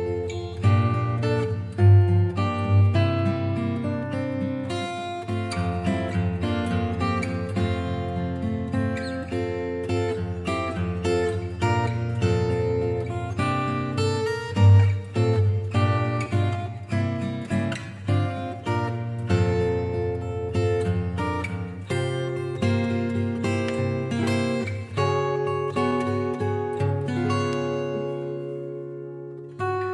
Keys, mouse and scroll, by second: 0.1 click, 0.8 click, 3.6 click, 14.4 click, 15.7 click, 16.9 7, 18.7 Return, 21.5 typing, 21.6 click, 26.5 click.